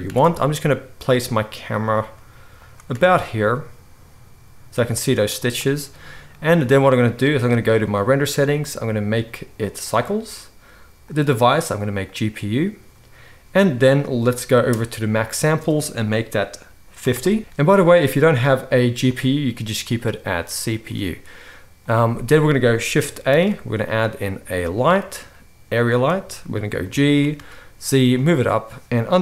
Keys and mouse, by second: 0.0 r, 1.8-8.4 middle drag, 2.0 g, 2.9 r, 8.4-28.2 drag, 23.3 shift+a, 26.8 g, 28.2-29.2 middle drag.